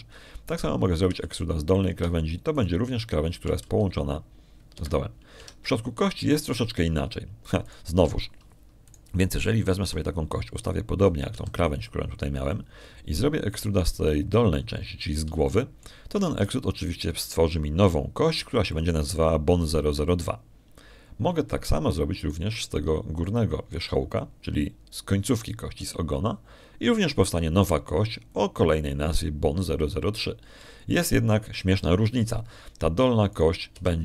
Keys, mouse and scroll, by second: 1.2 Escape, 2.3 click, 3.0 e, 3.6 click, 4.4 shift+click, 5.5 g, 6.6 Escape, 7.2 Tab, 9.5 right click, 9.9 Tab, 10.7 right click, 11.7 r, 12.8 click, 13.2 g, 14.3 click, 15.4 right click, 16.6 middle click, 17.3 shift+click, 18.3 shift+e, 20.6 click, 24.0 right click, 27.6 e, 30.2 click.